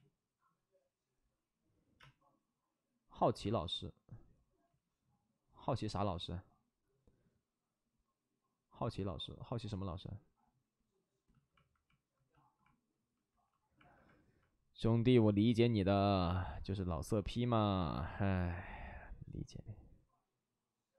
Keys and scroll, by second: 3.3 ctrl+z, 3.3 space, 4.6 ctrl+z, 10.1 ctrl+z, 13.2 ctrl+d, 17.3 ctrl+z, 18.6 c.